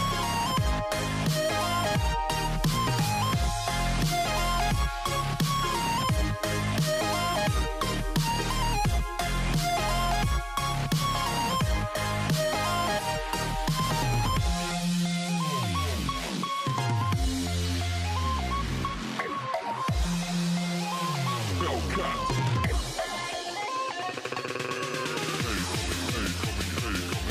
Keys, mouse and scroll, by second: 0.1-3.1 right drag, 3.7 shift+s, 6.5 click, 8.5 alt+h, 9.8 a, 12.5-14.7 right drag, 14.7 click, 15.5 click, 17.3-18.3 scroll down 1, 18.3 scroll down 2, 18.4 click, 20.3 g, 23.6 click, 24.7 click, 25.4-27.3 drag.